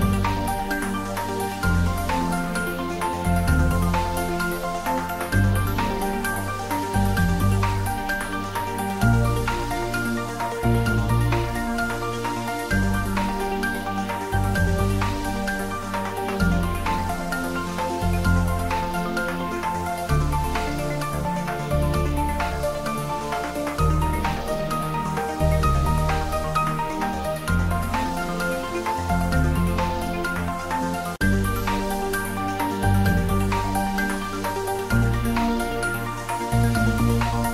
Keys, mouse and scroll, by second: 0.7 click, 1.1 x, 1.2 click, 4.0-5.8 typing, 5.4 click, 6.6 click, 6.8 ctrl+middle click, 7.1 ctrl+shift+middle click, 7.5 ctrl+middle click, 7.9-10.0 typing, 9.1 click, 10.3 click, 11.0 middle click, 11.5 ctrl+middle click, 12.2 ctrl+middle click, 12.8 middle click, 13.6 ctrl+middle click, 14.7 shift+middle click, 15.1 ctrl+middle click, 16.1 Tab, 17.7 Tab, 18.1 g, 19.2 click, 19.3 Tab, 19.9 click, 22.4 click, 23.0 Tab, 23.3 click, 24.0 Tab, 25.5 3, 25.7 click, 26.3 i, 30.9 click, 31.1 ctrl+middle click, 32.1 e, 34.2 Return, 34.3 Tab, 34.9 ctrl+middle click, 35.6 Tab, 36.9 ctrl+3, 37.4 ctrl+middle click.